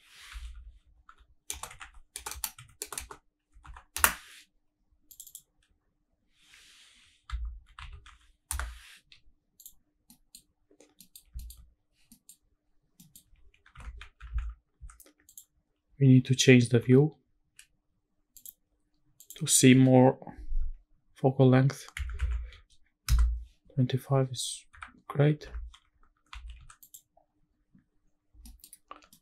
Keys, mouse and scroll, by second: 2.3 BackSpace, 3.0 BackSpace, 5.1-8.5 drag, 9.6 click, 9.9 scroll down 1, 10.1 middle drag, 10.5-11.0 scroll up 2, 11.0 middle drag, 11.4 shift+middle drag, 12.0 scroll down 2, 12.1 middle drag, 12.6-13.0 scroll up 2, 13.0 middle drag, 13.3 scroll down 1, 13.5-13.8 scroll up 2, 13.8 shift+`, 16.8 n, 18.3 click, 19.2-23.1 drag, 24.7 n, 25.5 shift+`, 28.0-28.5 scroll down 3, 28.5 middle click, 28.8-29.1 scroll up 3, 29.1-29.2 middle drag.